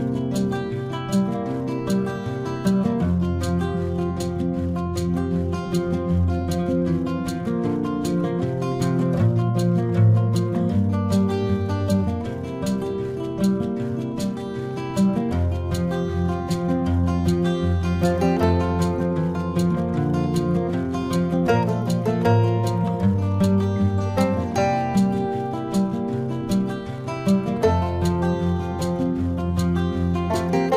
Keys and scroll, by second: 9.8 space, 13.9 space, 14.8 space, 16.8 space, 20.4 ctrl+-, 20.7 space, 21.5 ctrl+-, 21.8 space, 27.6 space, 28.9 space.